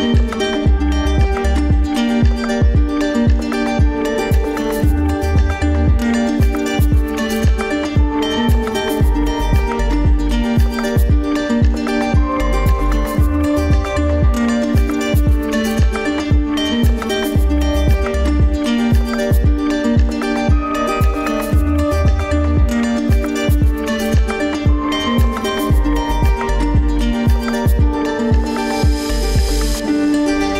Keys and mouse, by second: 1.3 drag, 9.8-10.3 drag, 16.0-17.0 right drag, 17.7 Tab, 22.6 alt+a, 25.1 click, 27.4 click, 27.8-30.5 drag.